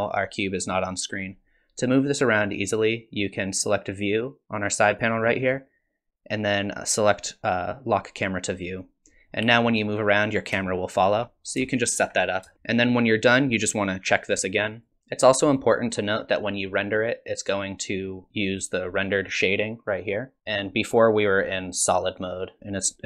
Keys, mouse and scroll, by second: 5.0 click, 8.6 click, 9.3-9.7 scroll down 3, 9.7 middle click, 10.7 shift+middle click, 11.4 scroll down 1, 11.7 shift+middle click, 14.8 click, 19.5 click, 22.6 click.